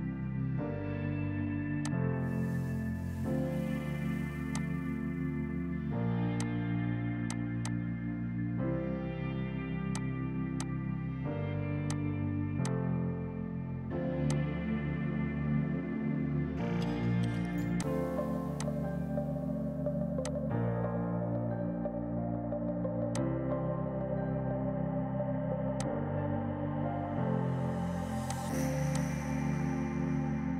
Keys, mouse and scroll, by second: 4.5 click, 6.4 click, 6.8 space, 7.3 click, 8.8 right click, 9.9 click, 12.1 click, 12.5 F2, 12.6 click, 12.8 right click, 14.3 click, 16.4 right click, 17.8 click, 23.0 ctrl+Num_Lock, 23.2 ctrl+click, 25.2 z, 25.8 click, 28.3 click, 28.9 click.